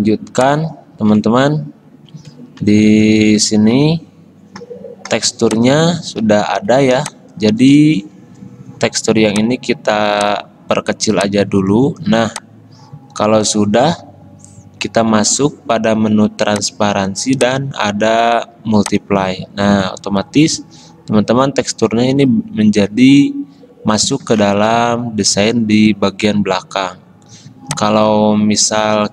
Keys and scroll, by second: 8.1 v.